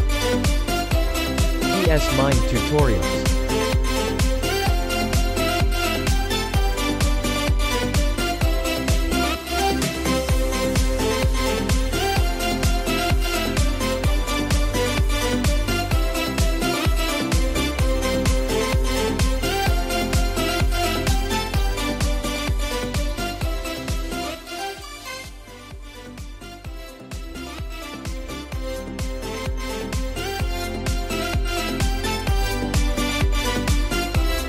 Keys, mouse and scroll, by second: 0.0 ctrl+z, 0.2-9.7 drag, 10.9-14.4 drag, 14.4 ctrl+z, 16.4-29.1 drag, 29.1 scroll down 1, 30.2-31.9 drag, 31.9 scroll down 1.